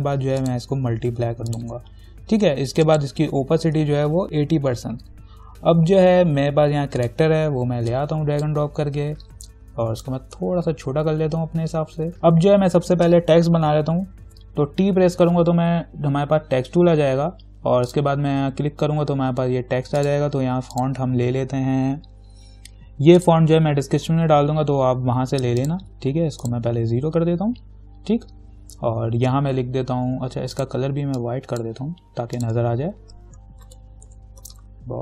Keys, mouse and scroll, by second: 4.0-4.7 typing, 7.2-10.2 drag, 10.2-12.1 alt+drag, 14.5 t, 18.1 click, 23.4 click, 25.8 click, 30.8 click, 33.6-35.0 typing.